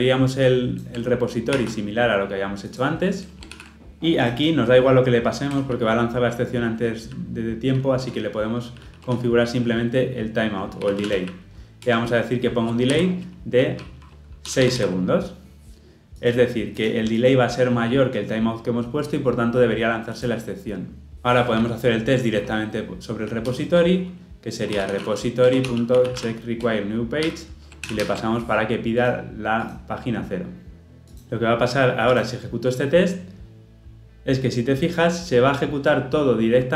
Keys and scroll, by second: 1.5 ctrl+c, 3.6 ctrl+v, 3.7 ctrl+alt+o, 9.1 ctrl+p, 11.8 Return, 25.4 Return, 27.9 ctrl+alt+o.